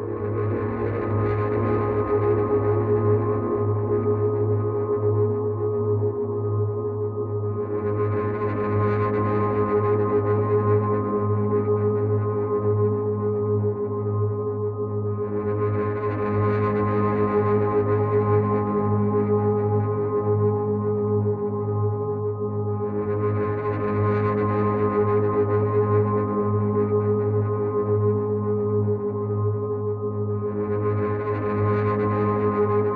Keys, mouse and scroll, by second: 0.3 right click, 3.3 click, 4.7 click, 6.1 right click, 8.3 click, 10.0 right click, 13.1 click, 14.7 click, 24.9 ctrl+z, 26.3 ctrl+z.